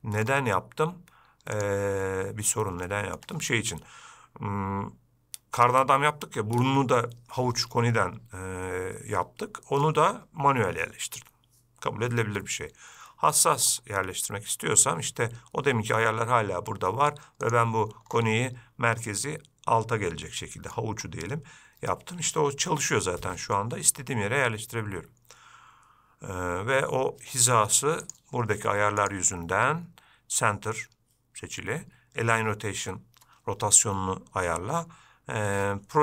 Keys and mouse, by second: 1.8 click, 3.1-3.4 shift+middle drag, 17.7-19.3 drag, 19.3-21.0 middle drag, 22.9 g, 29.4-35.8 drag.